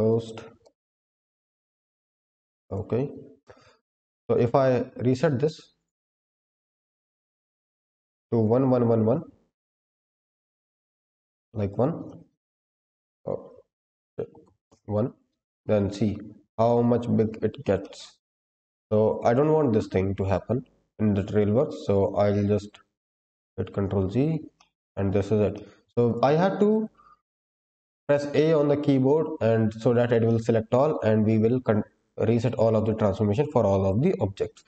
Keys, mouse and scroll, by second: 5.7 click, 6.1-6.6 scroll down 2, 6.5 click, 6.9 middle drag, 7.4-7.9 scroll up 2, 7.9 shift+middle drag, 9.0-11.9 drag, 13.4-14.6 drag, 15.3-16.5 scroll down 4, 16.5-17.5 scroll down 1, 17.7 shift+middle drag, 18.2-18.7 middle drag, 19.1 click, 20.3 ctrl+z, 20.7 ctrl+z, 22.0 ctrl+z, 22.6 ctrl+z, 23.2 ctrl+z, 23.9-24.5 scroll up 2, 24.5 shift+middle drag, 24.9-25.4 scroll up 2, 25.4 shift+middle drag, 26.0 click, 26.8 a, 29.4-30.2 scroll down 2, 30.2-30.7 middle drag.